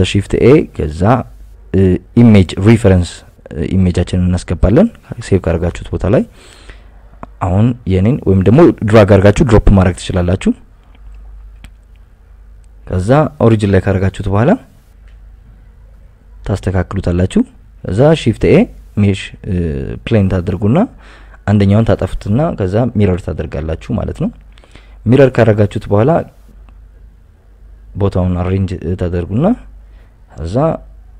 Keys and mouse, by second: 7.0 KP_1, 7.5 shift+s, 8.3 alt+r, 10.1 Escape, 10.2 KP_7, 11.0 KP_Add, 11.6 KP_Add, 12.5 click, 12.8 g, 13.0 x, 14.6 shift+a, 15.4 Tab, 16.2 ctrl+r, 17.2 Escape, 17.8 KP_Enter, 17.8 click, 18.2 x, 19.1 a, 19.5 click, 19.8 click, 21.5 g, 21.6 x, 22.2 click, 23.0 Tab, 23.5 g, 23.7 x, 26.1 click, 26.4 Tab, 27.1 right click, 27.6 Tab, 28.8 g, 29.0 z, 29.6 z, 29.8 y, 30.4 click, 30.7 right click, 31.0 g.